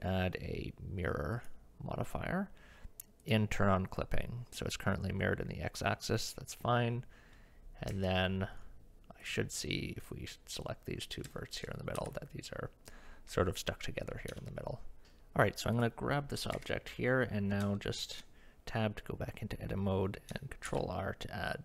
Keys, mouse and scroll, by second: 3.2 click, 7.9 Tab, 9.2 click, 9.7 click, 11.3 shift+middle click, 12.0 g, 15.7 click, 16.6 Tab, 17.8 shift+click, 19.6 middle click, 20.7 ctrl+r.